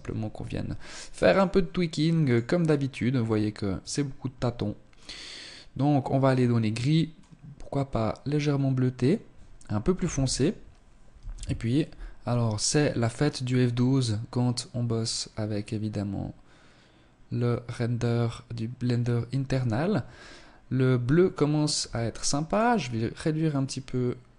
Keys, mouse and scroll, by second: 0.2 right click, 1.1 click, 2.1 scroll down 3, 2.7 click, 9.0 ctrl+s, 20.6 Escape, 21.4 click, 22.4 click.